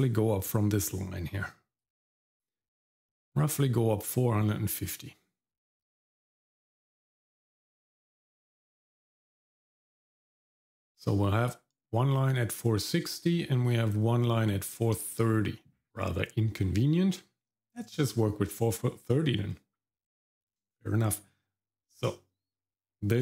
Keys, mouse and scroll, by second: 1.8 click, 5.1-17.5 drag.